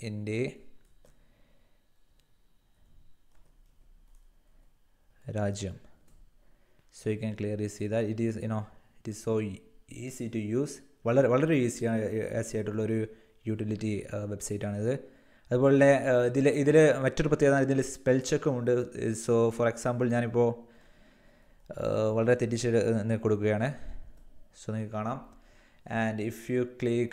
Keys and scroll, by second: 0.0-0.8 typing, 2.0-5.9 typing, 20.3-24.0 typing.